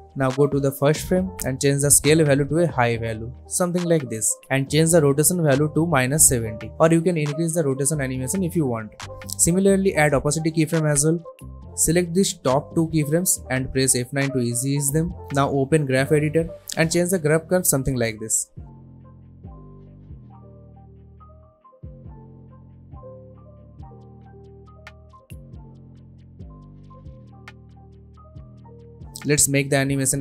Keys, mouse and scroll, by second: 4.7 Return, 5.7 space, 8.3 click, 10.4 space, 11.5-13.4 drag, 13.8 F9, 14.6 click, 18.0 space, 19.8 space, 20.0 click, 22.4-23.7 drag, 24.3 space, 26.6 space, 27.6 click, 29.2 shift+click, 29.9 y.